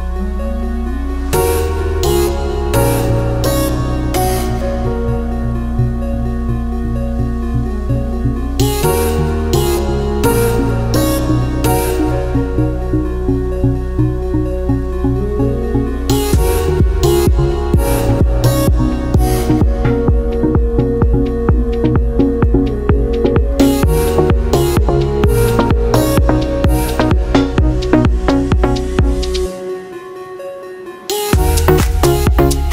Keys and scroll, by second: 4.7 ctrl+z, 20.8 ctrl+z, 21.5 ctrl+z, 28.6 ctrl+z, 30.0 ctrl+z, 31.0 ctrl+z.